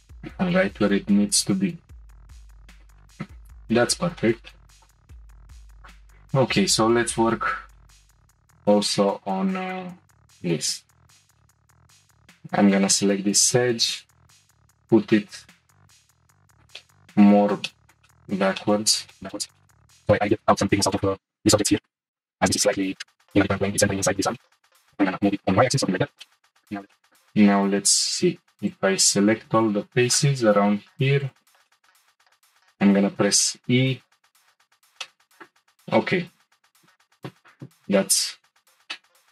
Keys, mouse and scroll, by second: 0.8 click, 2.7-3.8 shift+middle drag, 3.8-4.2 scroll up 1, 4.2-5.3 shift+middle drag, 5.6 Tab, 5.8 click, 6.0 Tab, 6.4-9.2 shift+middle drag, 9.2-9.8 scroll up 6, 9.8-12.3 shift+middle drag, 12.3 click, 13.4 g, 16.3 middle click, 17.2-17.6 scroll down 2, 17.6-19.6 shift+middle drag, 19.7-20.8 middle drag, 21.7 shift+middle click, 22.1 g, 24.3 shift+middle click, 24.8 g, 25.7 Tab, 25.9 shift+middle click, 26.4 middle click, 26.6 Tab, 26.9-28.0 shift+middle drag, 28.0 3, 28.7 click, 29.4 c, 31.2 click, 31.7 shift+middle click, 32.2 scroll up 1, 33.1 e, 35.0-38.0 shift+middle drag, 38.9 shift+middle click.